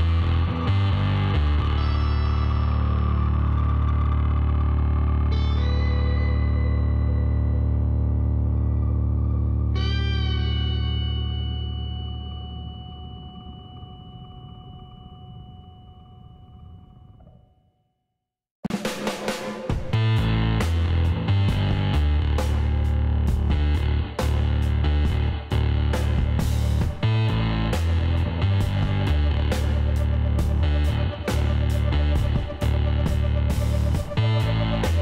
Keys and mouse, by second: 0.7 s, 4.4 Tab, 4.6 middle click, 6.3 a, 6.7 middle click, 7.9 middle click, 8.6-10.1 drag, 10.1-12.3 middle drag, 10.5 a, 12.3 KP_Divide, 12.9 middle click, 16.7 KP_1, 17.7 z, 18.7-19.8 drag, 19.3 Tab, 19.8 middle click, 19.9 click, 20.0 middle click, 21.8 z, 24.6 s, 26.9-28.5 middle drag, 28.5 Tab, 29.5 a, 29.9 middle click, 30.4-31.9 middle drag, 31.9 KP_1, 34.8 middle click.